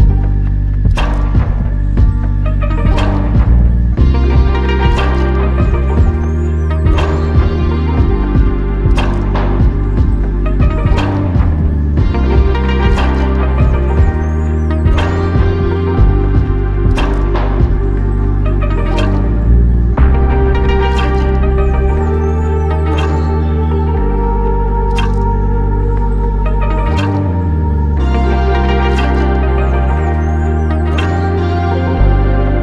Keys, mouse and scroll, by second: 0.4 shift+click, 2.9 ctrl+j, 5.6 ctrl+Tab, 9.2 alt+click, 15.5 f, 19.1 alt+click, 21.3 double click, 23.6 alt+click.